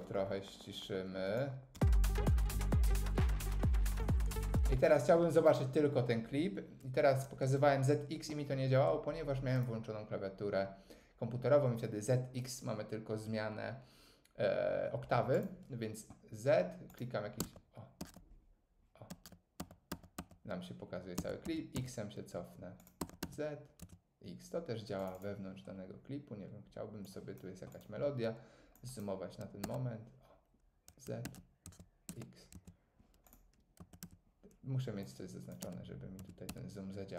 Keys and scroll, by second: 2.1 space, 17.4 z, 18.0 z, 19.6 z, 21.2 x, 23.3 z, 23.8 x, 29.6 z, 31.2 z, 31.6 x, 33.8 z, 35.6 z, 36.2 x.